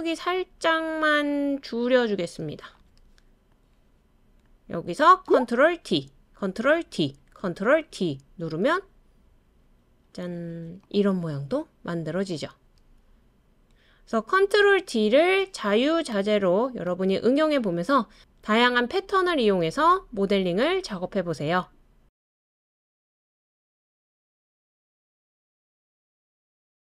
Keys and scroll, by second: 5.8 super+d, 6.9 super+d, 7.9 super+d, 8.9 super+d, 9.6 super+d.